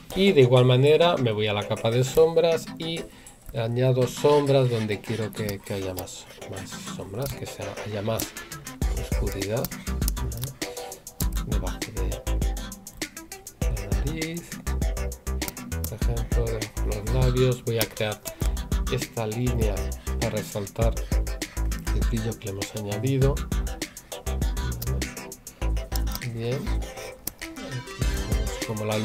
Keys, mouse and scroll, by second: 2.1 right click, 4.1 right click, 11.2 right click, 18.2 right click, 27.2 right click.